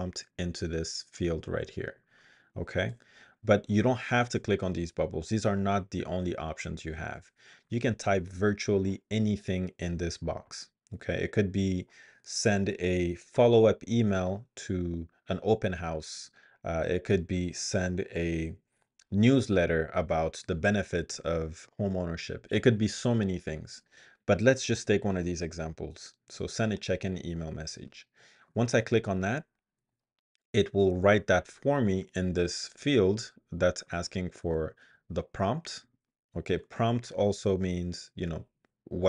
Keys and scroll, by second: 2.9 BackSpace, 34.7 super+x, 35.8 super+v.